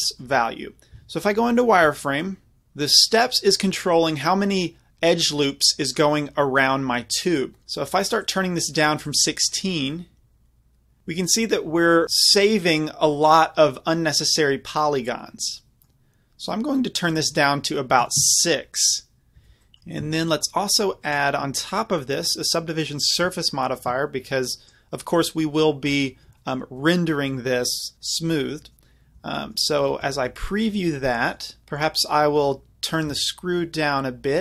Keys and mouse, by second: 0.9 z, 1.2-2.0 middle drag, 3.1-3.5 middle drag, 3.6 middle click, 3.9-6.1 middle drag, 8.2 click, 9.9 right click, 10.1 middle click, 10.3 middle click, 12.3 click, 13.2-14.2 middle drag, 14.3 middle click, 16.9-19.3 drag, 19.3 z, 19.4 z, 20.0 Tab, 22.1 click, 24.5-26.1 drag, 27.0-27.4 drag, 29.5 middle click, 30.2 middle drag, 30.6-30.9 middle drag, 33.4 middle click, 33.5 middle click, 34.0 middle click, 34.2 click.